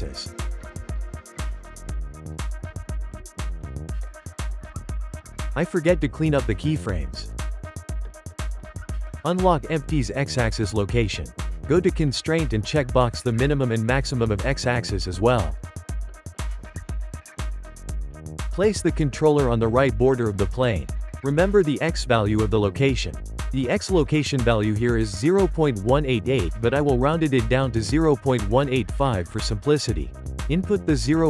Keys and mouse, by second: 0.1 click, 2.1-3.4 drag, 3.4 shift+middle click, 3.9 n, 5.0 click, 6.0 click, 6.6 x, 7.4-9.3 drag, 9.4 click, 11.4 click, 13.0 click, 14.2 click, 16.0 click, 17.6 g, 19.9 click, 25.5-27.3 drag, 28.0-29.3 shift+middle drag, 29.3-30.4 drag.